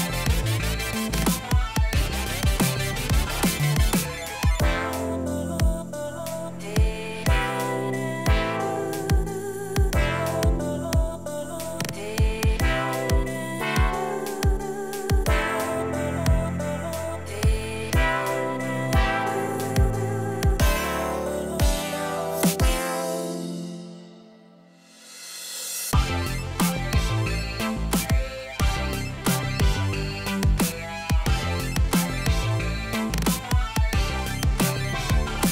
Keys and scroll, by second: 3.2 Left, 3.5 BackSpace, 4.0 space, 5.5 BackSpace, 5.8 space, 7.3 Left, 7.9 BackSpace, 8.1 space, 9.8 BackSpace, 10.1 space, 12.0 BackSpace, 12.2 space, 13.6 BackSpace, 13.8 space, 18.4 BackSpace, 19.9 BackSpace, 22.1-23.3 typing.